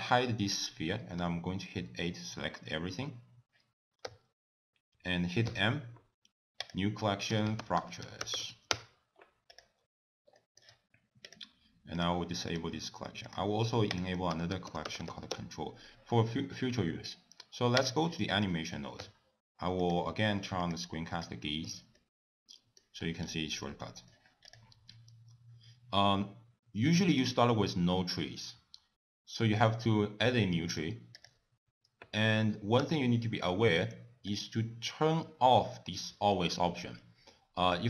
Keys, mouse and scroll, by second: 1.2 a, 4.1 n, 5.5 m, 10.4 shift+middle click, 11.4 click, 12.0 click, 12.5 click, 13.4 click, 14.0 click, 14.2 click, 21.7 n, 22.0 middle click, 23.0-23.7 scroll up 8, 23.7 middle click, 24.5 click, 25.0 scroll up 2, 27.2 click, 30.8 click, 32.9 t, 34.4 click.